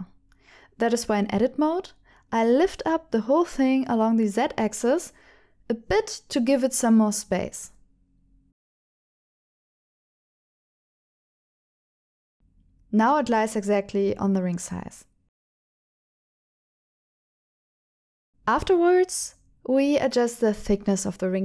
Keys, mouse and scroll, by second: 0.2 Tab, 1.3 g, 1.9 z, 7.4 shift+click, 8.7 shift+middle click, 9.5 shift+middle click, 11.3 click, 11.9 click, 12.6 shift+middle click, 13.5 g, 13.7 z, 14.8 shift+click, 15.2 shift+middle click, 18.1 shift+click, 18.4 alt+a, 19.2 click, 20.1 Tab, 20.6 ctrl+alt+shift+click.